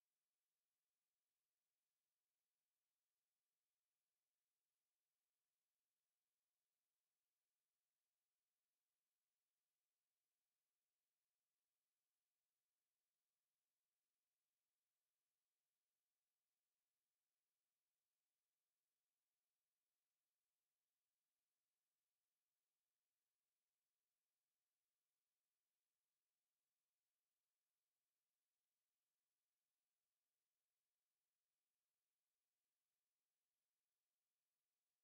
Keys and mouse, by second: 0.4 ctrl+z, 1.1 alt+click, 2.4 ctrl+z, 3.5 alt+click, 3.9 alt+right click, 4.4 alt+click, 4.8 right click, 5.8 click, 6.2 alt+click, 30.2 alt+right click, 30.6 alt+click, 31.4 alt+middle click, 31.9 alt+click, 32.8 shift+right click.